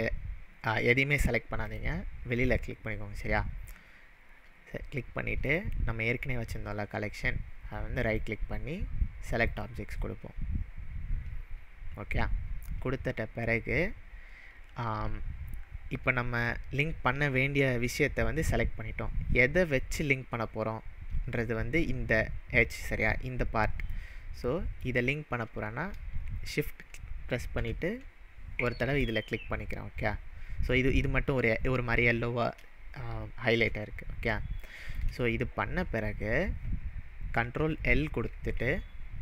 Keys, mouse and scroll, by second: 1.7 click, 5.5 click, 8.0 right click, 9.3-11.5 right drag, 9.4 click, 23.8 click, 24.0-24.8 middle drag, 29.0 shift+click, 34.7-35.2 shift+middle drag, 37.8 ctrl+l, 38.4 ctrl+l.